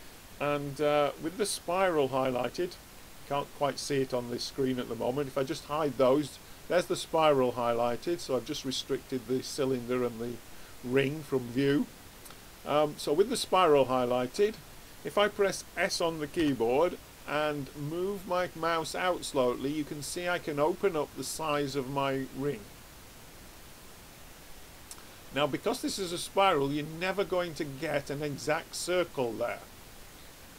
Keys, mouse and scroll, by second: 4.4-7.4 drag, 8.1-10.9 drag, 16.5 s.